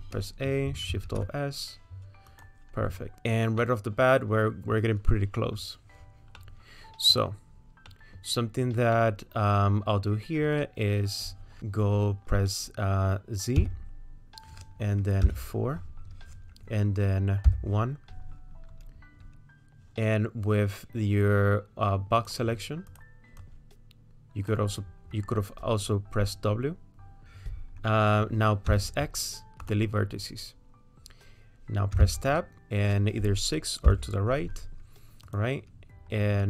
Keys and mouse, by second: 2.1 alt+shift+s, 3.8 middle click, 4.3 middle click, 6.4 middle click, 8.0 middle click, 9.0 click, 9.0 right click, 13.6 z, 17.5 KP_1, 22.9 click, 23.4-24.5 drag, 28.7 x, 32.0 Tab, 32.6 z, 35.3 click.